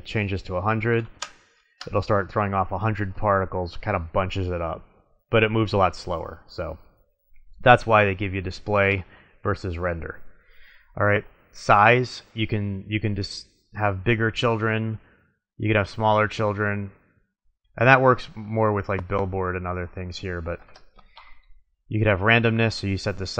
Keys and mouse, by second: 0.9 middle click, 1.1 KP_0, 7.3-9.1 drag, 11.6-13.6 drag, 20.0-21.8 drag.